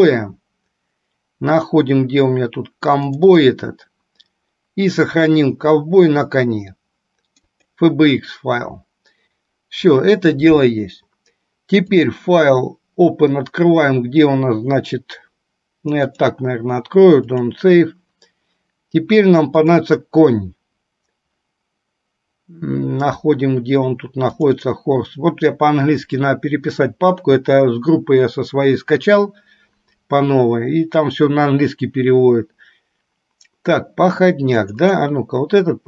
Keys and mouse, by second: 12.1-17.8 drag.